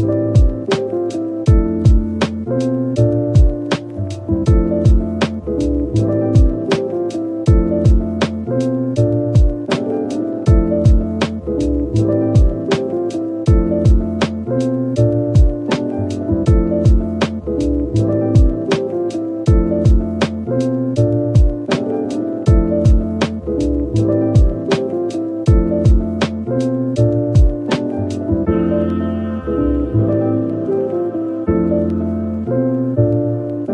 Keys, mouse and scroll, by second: 23.7-24.1 scroll down 1.